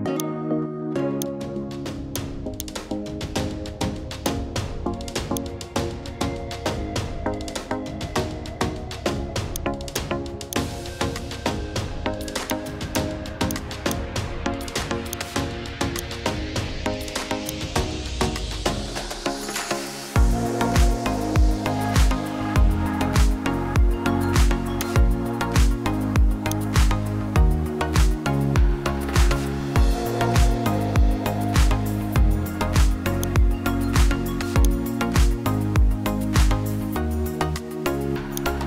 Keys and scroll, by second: 15.5 Caps_Lock, 18.7 ctrl+shift+g, 22.1 ctrl+j, 31.5 ctrl+t.